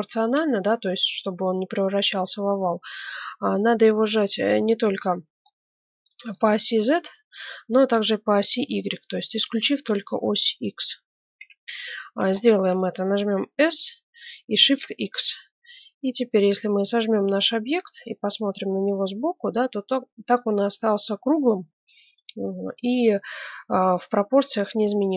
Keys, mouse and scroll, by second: 5.1-10.3 middle drag, 11.3 KP_1, 12.3-13.6 middle drag, 13.6 s, 14.5 click, 18.0-21.3 middle drag, 19.1 z, 22.3-23.9 middle drag.